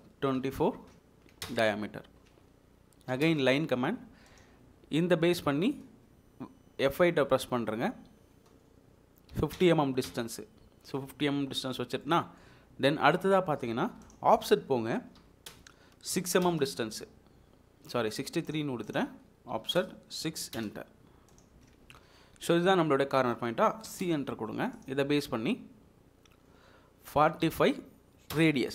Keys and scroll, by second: 0.0-0.6 typing, 1.5 Return, 3.2 l, 3.3 space, 9.3 typing, 10.1 Return, 10.9 Escape, 15.2 o, 15.5 Return, 16.4 typing, 16.5 Return, 18.0 Escape, 19.7 o, 19.8 Return, 20.5 6, 20.6 Return, 21.8 Escape, 24.0 c, 24.1 space, 27.2 typing, 28.4 Return.